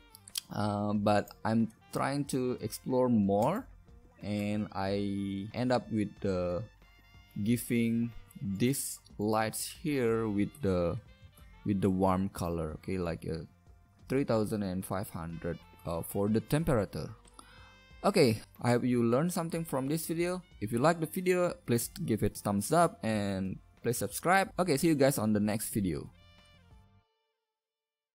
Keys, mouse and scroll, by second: 17.2-18.4 middle drag.